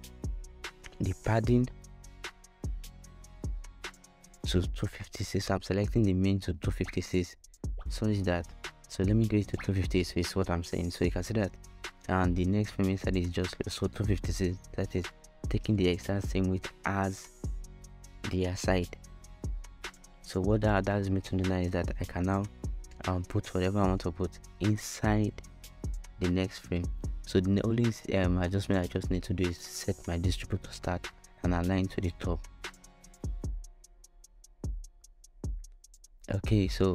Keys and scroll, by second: 2.4-3.9 typing, 7.5-9.1 typing, 11.1 BackSpace, 11.5 5, 12.2 6, 12.3 Return.